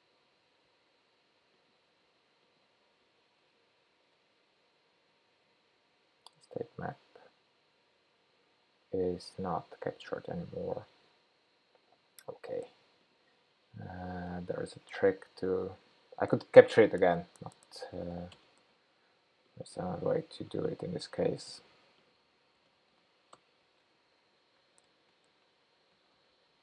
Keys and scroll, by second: 23.0 super+v, 26.3 super+v.